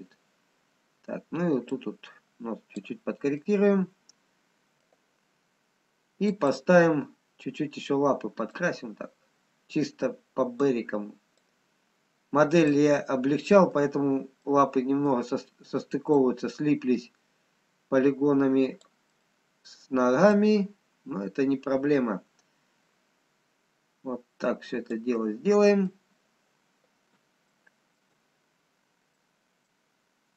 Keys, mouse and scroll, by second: 2.1 click, 3.4 middle click, 7.1 click, 7.5-8.0 scroll up 2, 8.8 click, 13.1 middle click, 14.1-14.4 scroll down 2, 15.1 middle click, 16.4 click, 19.8 middle click, 19.8-20.3 scroll down 1, 20.8 click, 25.7 middle click, 27.5 shift+middle click, 29.2 middle click, 29.2-29.6 scroll up 5.